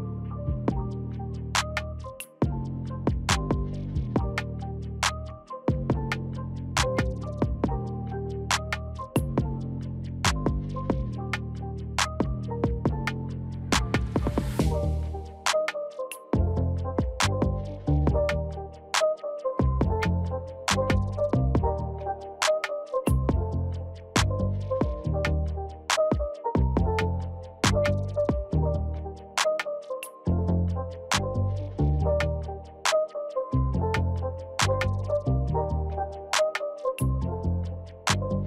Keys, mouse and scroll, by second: 5.2-15.0 drag, 15.7 right click, 16.6-24.5 drag, 32.6-36.1 drag, 36.5 ctrl+g, 37.4-38.4 drag.